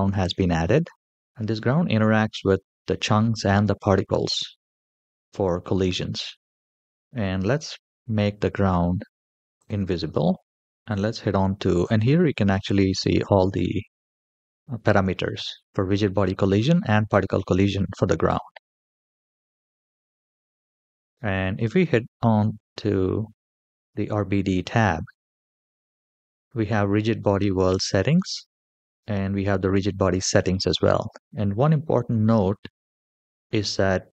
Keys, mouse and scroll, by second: 0.6 middle click, 1.1 scroll up 2, 3.6-4.1 shift+middle drag, 4.8-5.7 scroll up 1, 5.7 middle click, 5.7 scroll up 1, 6.3-7.1 scroll down 3, 9.4 click, 10.5 middle click, 10.7 click, 11.6 click, 13.4-14.5 scroll down 1, 14.5-16.1 scroll down 1, 20.3 click, 27.5 click, 28.6 scroll down 1.